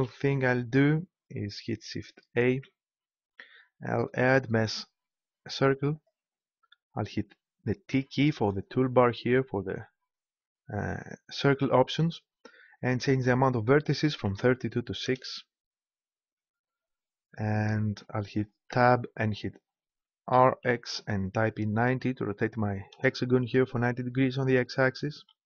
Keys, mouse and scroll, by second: 2.5 shift+a, 7.9 t, 11.5-13.4 drag, 18.6 Tab, 20.3 r, 25.2 s.